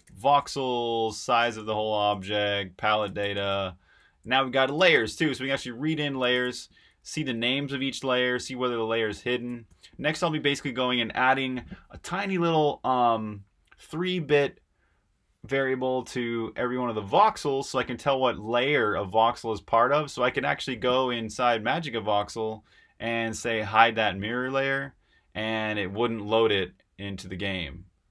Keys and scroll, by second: 6.7 typing, 10.1 typing, 15.6-20.8 typing, 21.1 super+Tab.